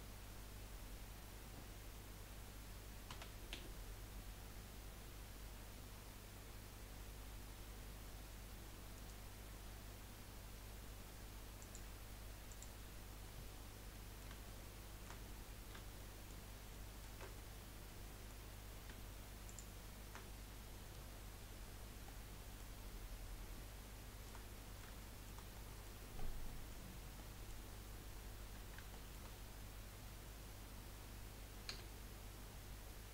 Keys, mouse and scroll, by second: 3.1 s, 11.6 click, 12.5 click, 13.5-13.9 scroll down 4, 13.9-18.5 middle drag, 18.5 scroll up 1, 19.4 shift+click, 22.0-26.2 middle drag, 26.2 scroll down 3, 26.4 middle click, 26.9 scroll up 1, 27.2-29.3 middle drag, 29.3-31.0 scroll up 2, 33.0 g.